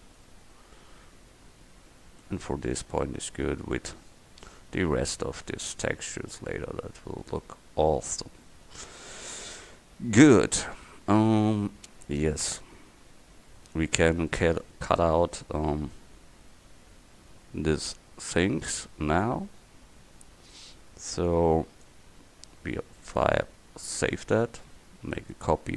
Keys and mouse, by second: 1.3 middle click, 1.8 Tab, 2.2 Tab, 2.6 a, 12.5 KP_1, 18.7 middle click, 20.6-23.1 right drag, 21.3-25.2 drag, 25.2 right click.